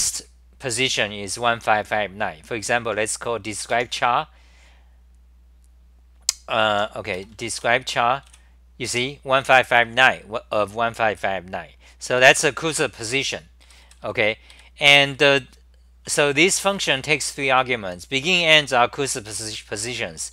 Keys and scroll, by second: 0.0-3.9 typing, 6.7 h, 8.3 w, 8.9 2, 12.0 ctrl+g, 12.4 w, 13.6-18.4 typing.